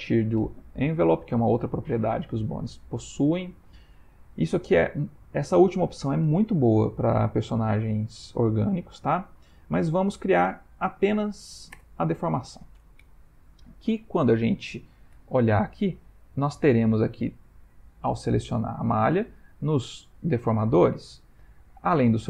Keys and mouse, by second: 3.4 Up, 4.0 Down, 9.1 Up, 18.0 click, 19.8 click.